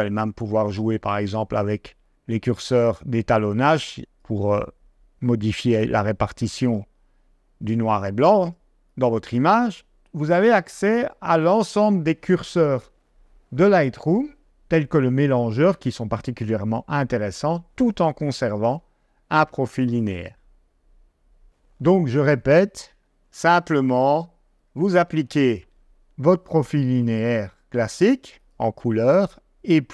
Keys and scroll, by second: 22.9 g, 24.6 d.